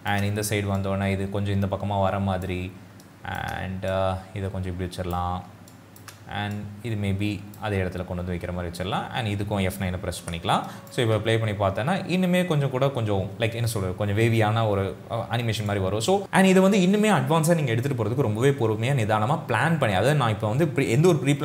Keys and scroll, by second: 10.2 F9, 14.4 space.